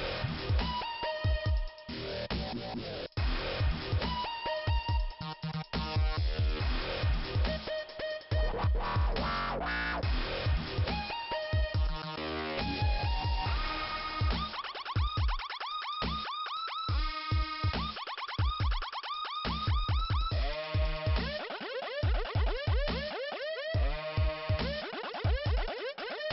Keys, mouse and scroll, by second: 0.2 click, 2.1 click, 2.2 click, 2.5 scroll down 1, 5.8 click, 8.1 click, 9.5 click, 10.8 click, 13.1-13.7 scroll up 1, 13.9 click, 14.9 click, 18.3 click, 18.5 click, 20.9 click, 21.1 click, 23.4 click, 24.6 click, 25.7 click, 26.2-26.3 scroll down 1.